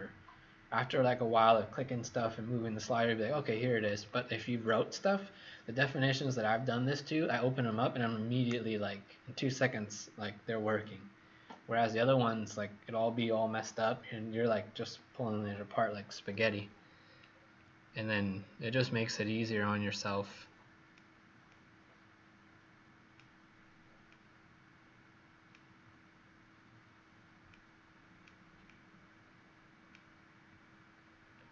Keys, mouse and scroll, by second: 17.2 scroll down 2, 18.3-19.1 scroll down 2, 19.1-19.5 scroll up 2, 20.0 click, 20.0 scroll up 2, 21.4 click, 31.3-31.5 scroll down 2.